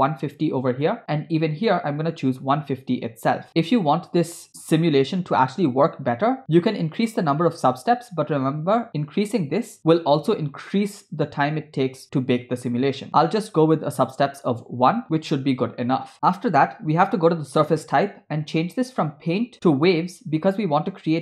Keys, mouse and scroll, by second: 2.2-3.5 drag, 13.1 click, 16.1-17.0 scroll down 1, 19.0-21.2 drag.